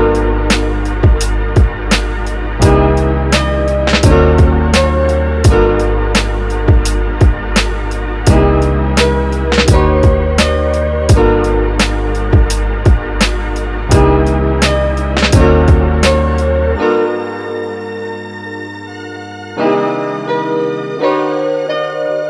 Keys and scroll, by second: 20.8 super+s, 21.1 Right, 21.4 BackSpace.